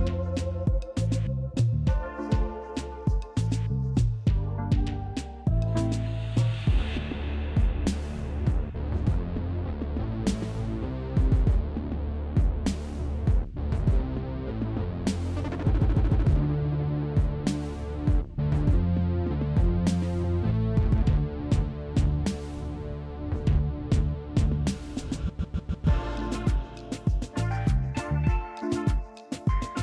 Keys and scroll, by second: 0.4 s, 2.3 f, 9.6 f, 13.9 ctrl+z, 14.6 b, 15.1 f, 15.1 F3, 17.8 f, 26.1 f.